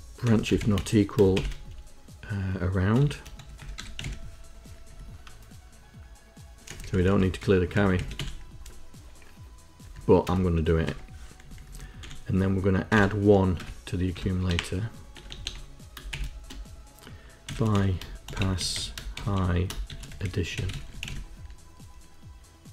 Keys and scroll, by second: 0.0-1.2 typing, 2.7-4.5 typing, 4.8 Down, 6.6 Up, 6.8 Up, 6.9 Up, 7.0 Up, 7.3 Home, 7.7 Down, 8.1 Delete, 8.1 End, 9.7 Up, 10.2 Return, 10.8 BackSpace, 11.4 Down, 11.5 Down, 11.6 Down, 11.9 End, 12.8 BackSpace, 14.0 Tab, 14.4 BackSpace, 15.1 BackSpace, 15.4 BackSpace, 16.0 shift+;, 17.4-21.4 typing.